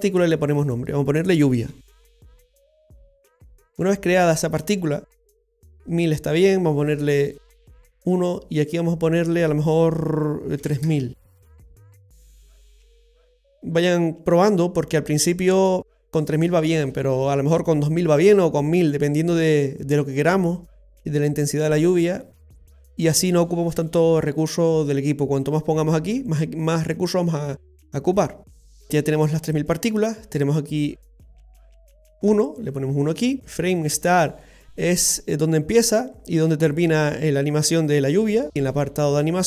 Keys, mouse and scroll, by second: 0.6 click, 0.7 click, 1.9 l, 7.4 click, 8.6 click, 11.6 KP_0, 13.0-14.6 scroll down 1, 14.6-15.8 scroll down 2, 28.5-29.1 scroll down 2.